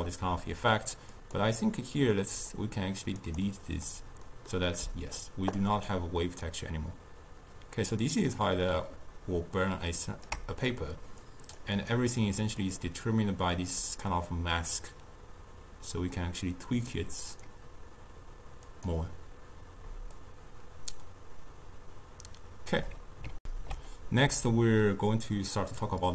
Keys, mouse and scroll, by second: 1.2-4.3 drag, 4.3-5.9 middle drag, 5.9-9.0 shift+drag, 11.4 click, 11.8 click, 12.7 click, 13.6-16.7 drag, 18.8 click, 20.2-23.3 shift+drag, 23.4 alt+shift+q.